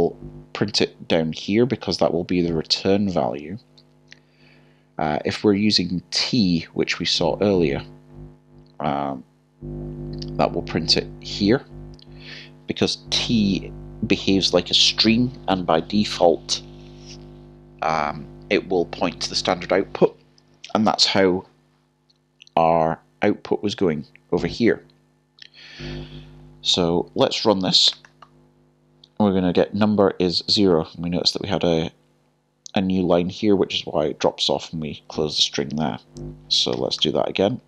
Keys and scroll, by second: 27.9 typing, 37.3-37.6 typing.